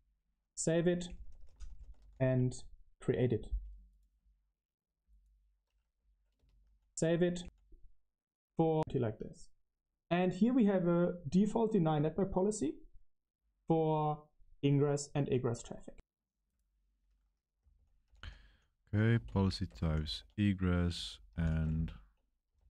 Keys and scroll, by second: 0.6-3.4 typing, 6.6 space, 7.3 BackSpace, 8.7 BackSpace, 17.4-22.6 typing.